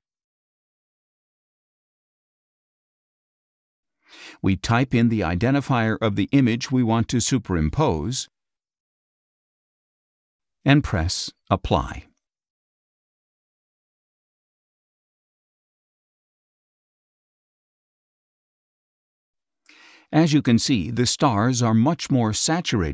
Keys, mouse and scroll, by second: 1.7-2.3 scroll up 4, 2.7 scroll up 1, 3.5 click, 6.6 click, 7.7-9.5 typing, 10.9-12.2 drag, 13.2 click, 13.7 space, 13.8 click, 15.2-16.5 drag, 15.2 space, 16.6 click, 18.2 click, 19.2 scroll down 1, 19.6 space, 19.7 click, 20.6 ctrl+shift+z, 21.7 z.